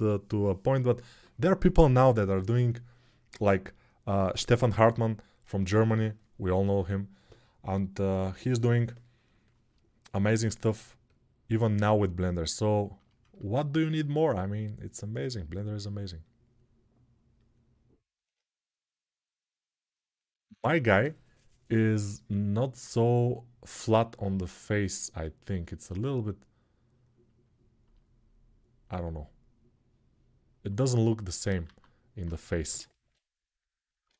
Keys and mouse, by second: 10.4-13.9 ctrl+alt+drag, 31.5 alt+q, 32.4 g, 32.9-34.1 ].